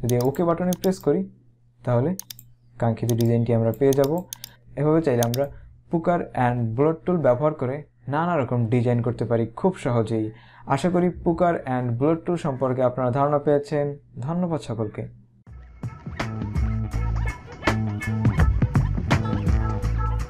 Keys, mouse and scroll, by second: 2.4 click, 5.4 right click.